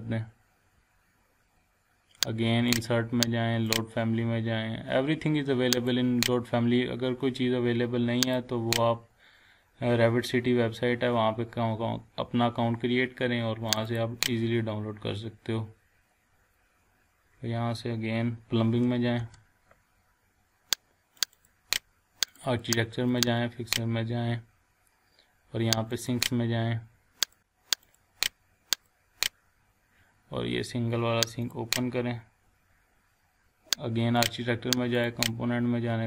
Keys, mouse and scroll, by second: 2.7 click, 8.2 click, 13.7 click, 17.1-18.9 scroll down 1, 19.2 p, 20.1-20.6 scroll down 1, 21.2 click, 25.9 click, 31.4 click, 32.2 scroll down 1, 34.2 click.